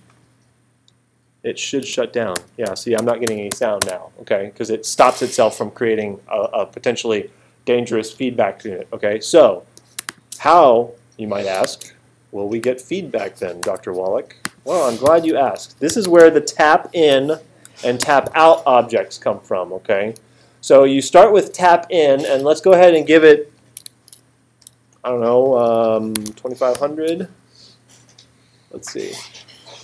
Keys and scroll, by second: 1.8 space, 13.6 BackSpace, 15.1-16.7 typing, 17.6 Right, 18.0 space, 25.9-27.0 typing.